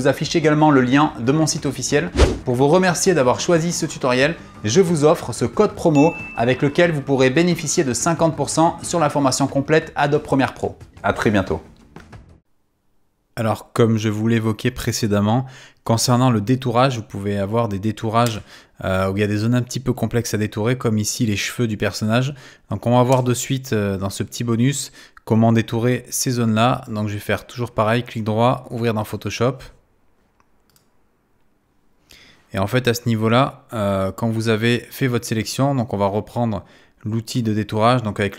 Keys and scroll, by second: 18.2 space.